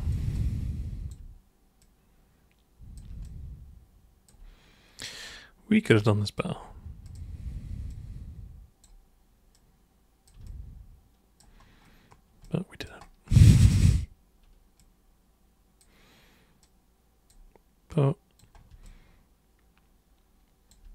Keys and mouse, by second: 0.3-1.1 alt+super+drag, 1.8 super+click, 3.2-4.2 alt+super+drag, 5.0 super+click, 6.0 alt+super+click, 7.0 super+click, 7.9-8.8 super+drag, 9.5-10.2 super+drag, 10.4-11.4 alt+super+drag, 12.4 alt+super+click, 13.7 super+click, 14.7-15.7 super+drag, 16.6 super+click, 17.9 super+click, 18.8-20.7 alt+super+drag.